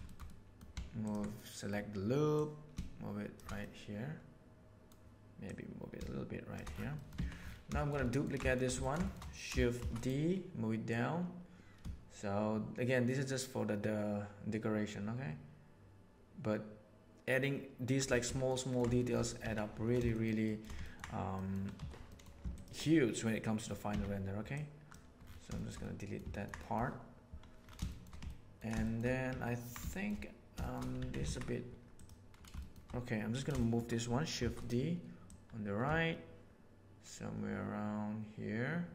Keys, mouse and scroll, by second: 0.0 shift+middle click, 0.2 middle click, 1.3 middle click, 2.4 right click, 3.6-4.8 middle drag, 5.4-6.6 right drag, 6.9 middle click, 7.1 Tab, 7.7 shift+middle drag, 8.0 ctrl+middle drag, 8.4 shift+middle click, 8.8 ctrl+middle click, 9.0 shift+middle click, 9.8 shift+d, 10.8-12.7 middle drag, 18.4 ctrl+middle drag, 18.9 shift+middle drag, 19.4 Tab, 20.0 shift+middle click, 20.4 shift+middle click, 20.8 ctrl+middle click, 21.4 middle click, 21.7 3, 23.8 x, 25.5 shift+middle click, 25.8 middle click, 26.3 ctrl+middle click, 26.6 middle click, 27.8 shift+middle click, 28.2 ctrl+middle click, 28.8 shift+middle click, 29.4 ctrl+middle click, 29.8 shift+middle click, 30.6 shift+middle click, 31.0 Tab, 31.2 alt+a, 32.6 shift+middle click, 33.5 shift+middle drag, 34.3 shift+d, 35.2 click.